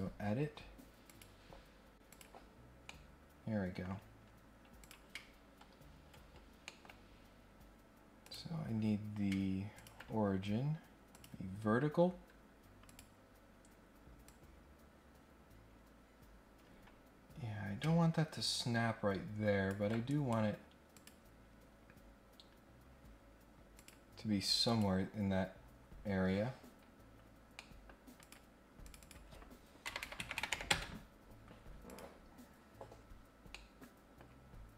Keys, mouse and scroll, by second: 1.1 click, 2.1 click, 2.8 middle click, 4.7 click, 6.6 middle click, 7.0 scroll up 2, 7.3 scroll down 2, 8.2 click, 9.7 ctrl+click, 11.1 click, 12.8 click, 14.2-19.6 drag, 20.1 right click, 20.9 click, 23.7 click, 24.6 click, 26.7-27.2 scroll down 2, 27.5-27.8 scroll up 1, 28.2 click, 28.8 click, 29.0 click, 31.8 click, 33.4 scroll down 1, 33.4-34.2 scroll up 1.